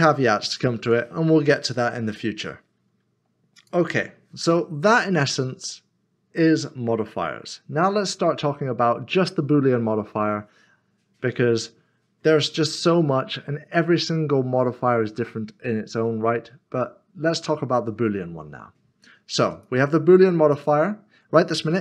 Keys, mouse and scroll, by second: 1.7 middle click, 3.5 click, 19.6 click.